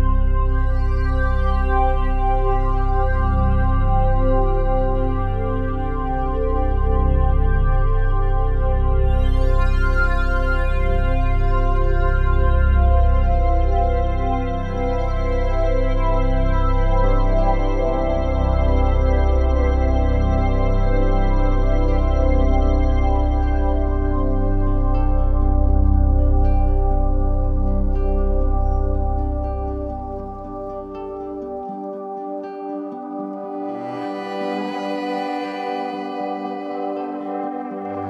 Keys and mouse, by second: 1.0 ctrl+alt+click, 2.2-5.3 typing, 2.6 click, 5.9 click, 7.4-8.1 typing, 8.5-13.6 drag, 12.5-14.6 typing, 14.1-16.2 drag, 16.2-17.1 typing, 16.4 alt+click, 17.8 click, 18.3 alt+click, 19.8 alt+click, 21.1 typing, 22.7-24.2 drag, 24.9-26.0 drag, 27.3 click, 30.0-31.1 drag, 33.2 click, 34.8-35.9 drag, 37.7 ctrl+z.